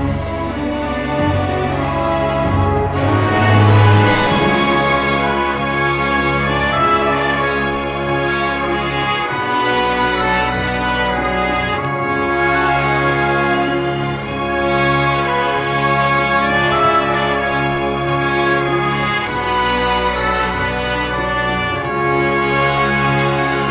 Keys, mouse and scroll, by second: 0.3 click, 1.1 scroll up 1, 1.8 click, 2.7 click, 4.0-4.3 scroll up 2, 4.7 scroll down 2, 5.7 click, 7.0 click, 12.5 click, 15.0-15.7 drag, 16.3 4, 18.1 click, 19.1 click, 20.1-23.1 drag, 23.4 0.